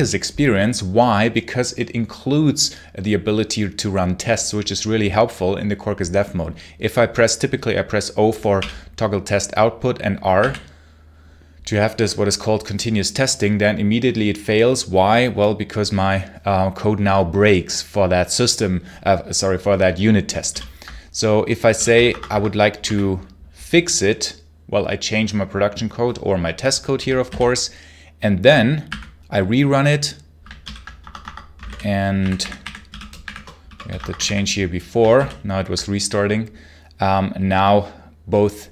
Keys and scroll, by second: 8.4 o, 10.2 r, 20.4 super+l, 21.3-23.2 typing, 27.1 super+h, 28.7 r, 30.5 super+l, 30.8 Escape, 31.4-34.6 typing, 35.0 super+h.